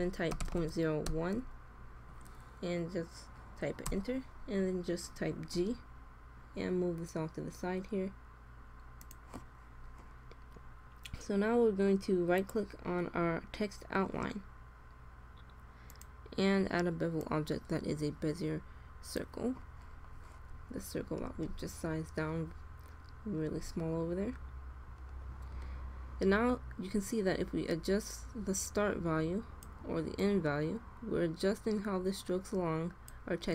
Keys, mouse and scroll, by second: 4.5-5.9 middle drag, 5.5 g, 9.5-12.5 middle drag, 12.5-13.9 drag, 14.0-15.8 middle drag, 20.0-23.6 middle drag, 27.0-28.7 drag, 30.2-31.8 drag.